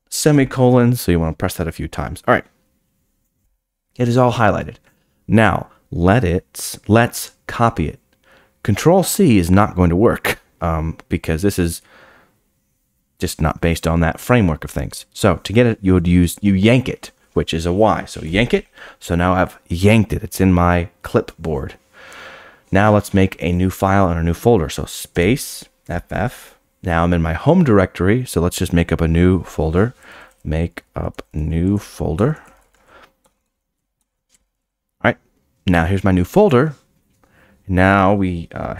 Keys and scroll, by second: 0.0-0.3 typing, 18.2 y.